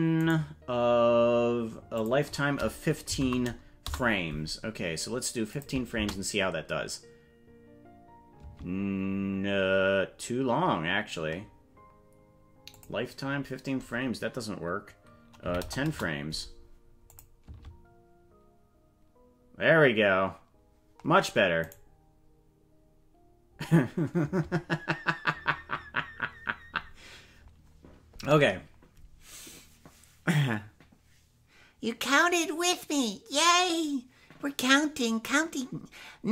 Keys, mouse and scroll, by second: 0.3 right click, 2.0-4.5 drag, 5.5 click, 5.9 space, 8.5 space, 9.0 scroll down 3, 9.5-10.3 scroll up 3, 12.7-16.3 drag, 17.1 click, 17.4 space, 21.8 right click, 24.4 space.